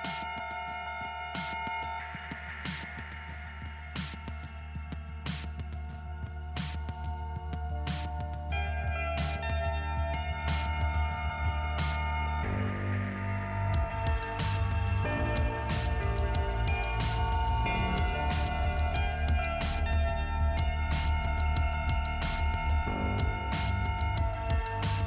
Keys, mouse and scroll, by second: 1.4 click, 4.7 click, 4.9 click, 5.0 click, 5.3 click, 5.4 click, 6.8 middle click, 7.4-8.2 scroll down 1, 9.0 middle click, 9.7 scroll up 1, 11.2 click, 11.2 click, 13.5 click, 13.6 click, 14.7 click, 14.8 click, 14.9 click, 15.0 double click, 15.4 double click, 15.5 double click, 15.6 double click, 16.0 double click, 16.7 double click, 16.9 click, 17.1 click, 18.7 click, 18.8 click, 21.9 click, 22.1 click, 22.1 click, 22.2 click, 23.2 click, 23.3 click, 23.8 scroll down 1, 24.1 click.